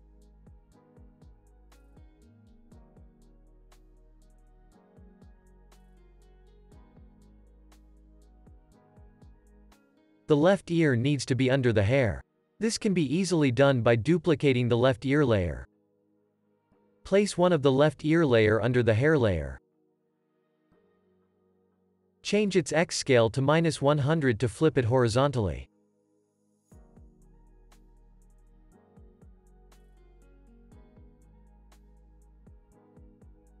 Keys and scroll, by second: 7.3 p, 14.5 super+d, 22.8 shift+s, 26.8 Left, 28.0 -, 28.1 Return.